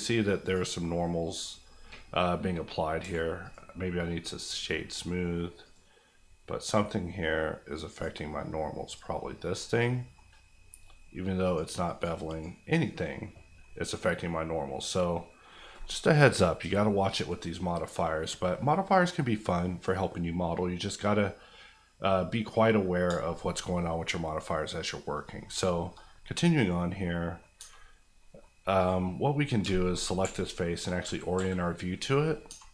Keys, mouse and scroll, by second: 3.0 q, 3.4 click, 9.5 middle click, 11.4 click, 13.6 middle click, 17.6-23.0 middle drag, 23.0 shift+middle click, 23.6 middle click, 25.2 middle click, 25.5 shift+middle click, 25.9 middle click, 27.4 middle click, 27.8-28.2 scroll up 1, 28.2 middle click, 28.8 click, 29.6 shift+click, 31.0 KP_5, 32.2 scroll down 1, 32.5 Tab.